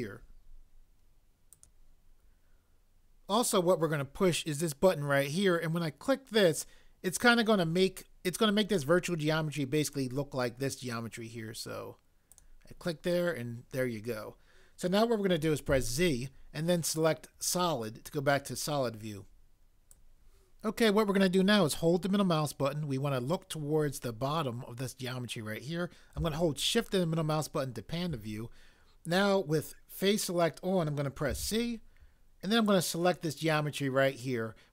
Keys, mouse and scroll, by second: 1.7 click, 12.3 click, 15.7 z, 17.4 click, 20.1 click, 31.3 c.